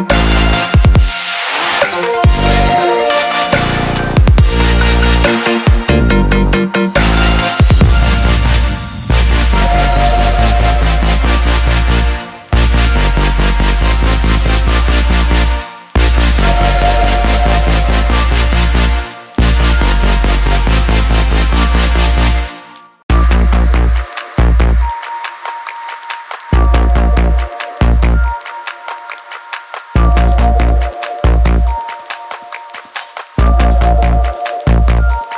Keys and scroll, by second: 15.5 ctrl+t, 30.5 ctrl+shift+i, 32.6 Delete, 34.0 ctrl+d.